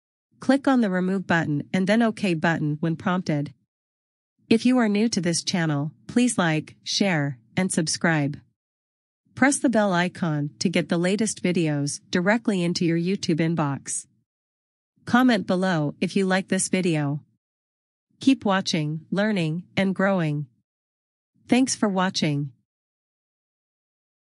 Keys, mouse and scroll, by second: 1.9 click, 7.5 click.